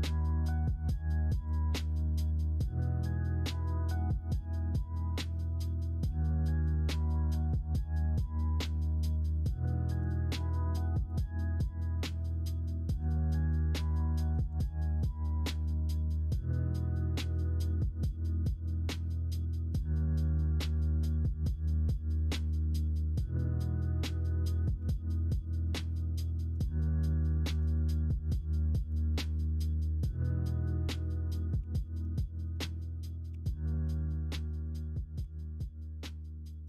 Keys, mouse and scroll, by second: 0.4-1.8 drag, 2.0 ctrl+r, 3.5 middle click, 3.8 2, 4.2 middle click, 4.5 ctrl+r, 5.3 middle click, 6.0 3, 7.3 middle click, 9.0 shift+click, 10.1 middle click, 10.9 s, 12.4 ctrl+z, 12.9 ., 14.3 s, 15.2 ctrl+z, 16.5 middle click, 18.4 middle click, 24.7 2, 26.8 3, 26.8 4, 27.8 shift+click, 28.7 s, 30.3-31.5 middle drag, 31.5 3, 33.3 shift+r, 34.3 middle click, 35.2 2.